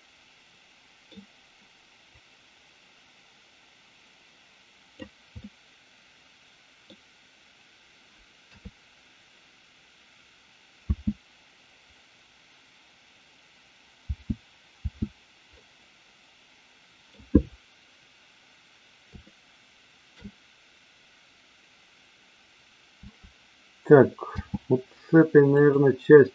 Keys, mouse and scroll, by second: 2.1-5.0 drag, 5.4-6.9 middle drag, 8.4 KP_3, 10.8 space, 14.0 space, 14.8 space, 15.5-17.2 middle drag, 19.3 shift+middle click, 24.3 space, 25.5 click.